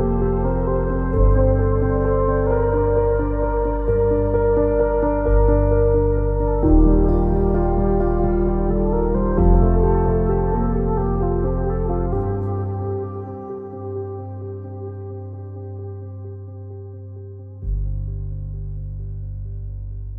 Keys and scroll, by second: 15.1 w, 16.8 w, 17.7 ctrl+z.